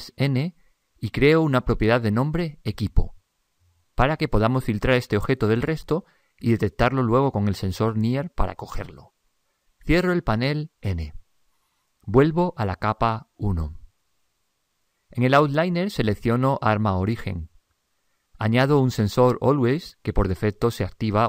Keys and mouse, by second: 0.3 n, 1.4-3.8 drag, 10.9 n, 13.3 click, 17.5 click.